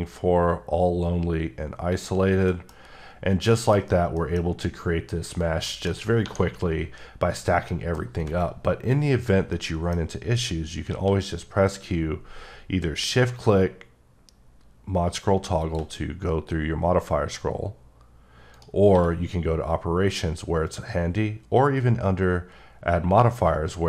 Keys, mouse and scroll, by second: 2.2 scroll down 1, 2.5 middle click, 3.5 middle click, 3.9 scroll down 1, 4.2 middle click, 5.7 middle click, 6.3 1, 7.7 middle click, 8.4-9.1 scroll up 2, 9.1-9.5 scroll down 1, 9.5 middle click, 10.9 q, 15.6 shift+click, 16.2 scroll up 3, 17.0-17.7 scroll up 7, 17.8-18.5 scroll down 16, 18.5 right click, 18.9 q.